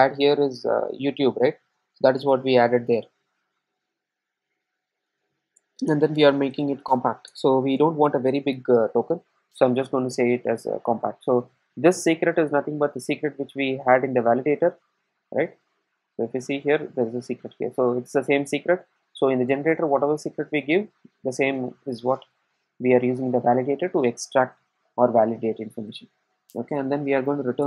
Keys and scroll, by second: 7.3 Return, 10.1 super+s.